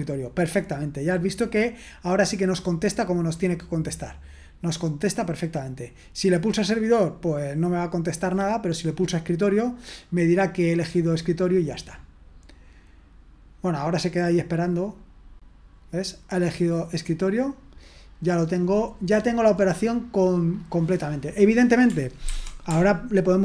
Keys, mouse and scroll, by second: 5.9 click, 8.7-9.8 drag, 11.5-13.0 scroll down 1, 14.9-17.3 drag, 19.1-20.7 scroll down 1, 21.1-22.1 drag, 22.2 ctrl+c.